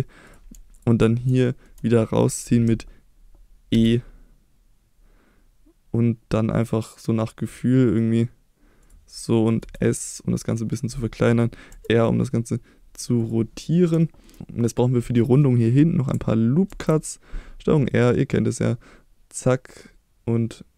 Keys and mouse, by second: 0.3 click, 0.8 shift+click, 1.4 shift+middle click, 3.7 e, 8.8 click, 9.6 s, 10.7 click, 11.7 r, 13.2 click, 14.0 middle click, 16.7 ctrl+r.